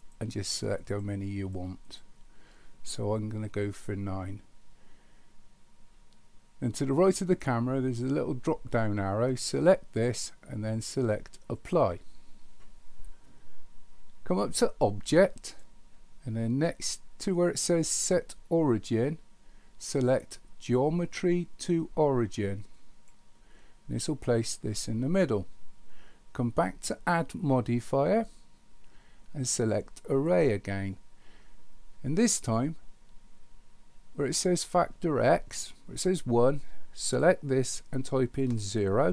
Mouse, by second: 0.8 click, 1.5 click, 1.8 click, 9.6-11.8 drag, 15.4-23.1 drag, 28.2-30.3 drag, 37.0-39.1 drag.